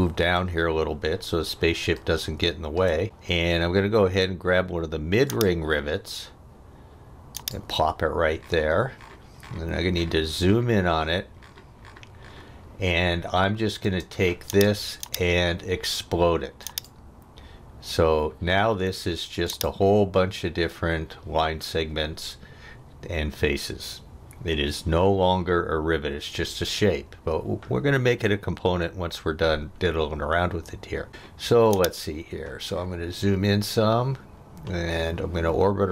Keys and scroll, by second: 13.8 space.